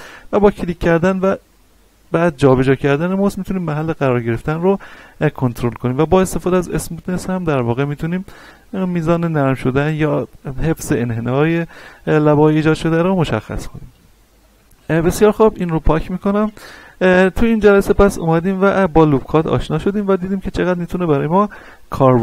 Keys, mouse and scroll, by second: 0.3 click, 4.3-10.3 drag, 10.3 middle click, 11.3 scroll up 1, 13.8-14.3 scroll down 1, 14.3 Tab, 15.0 click, 15.6 scroll down 1, 17.4 shift+middle click, 18.1 middle click, 18.6-19.0 scroll up 2, 19.0 shift+middle click.